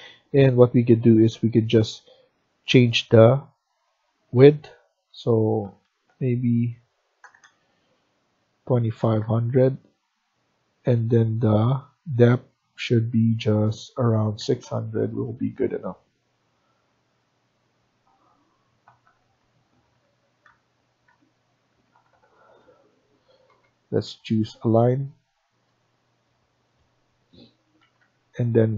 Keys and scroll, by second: 5.3-7.3 typing, 8.3-9.0 typing, 13.8-14.6 typing, 17.1 Escape, 19.1 Up, 19.8 Up, 20.4 Left, 20.5 Left, 20.9 Down, 21.7 Right, 22.3 Escape, 22.5 Escape, 23.4-23.9 typing, 27.7 Escape, 27.9 Escape.